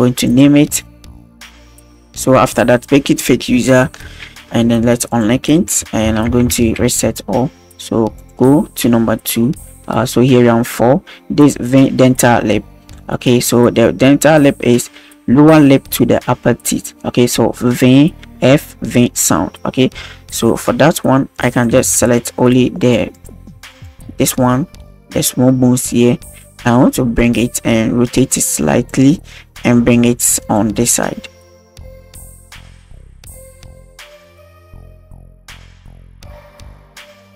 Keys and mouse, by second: 0.3-2.1 drag, 3.1 click, 4.4 ctrl+s, 5.1 drag, 5.5 a, 6.1 alt+g, 6.4 alt+r, 6.6 alt+s, 8.2 click, 21.5 right click, 22.1 shift+right click, 22.9 shift+right click, 23.2 shift+right click, 25.3-25.6 middle drag, 26.4 click, 28.2 click, 29.6 click, 30.9-31.2 drag, 31.3 KP_1, 31.8 click, 32.8 a, 32.8 i, 33.1-34.1 shift+drag, 35.5 shift+middle click, 35.6 click, 35.7 a, 35.8 alt+g, 35.8 alt+r, 35.9 alt+s, 36.1 click, 36.5 shift+click, 36.7 click.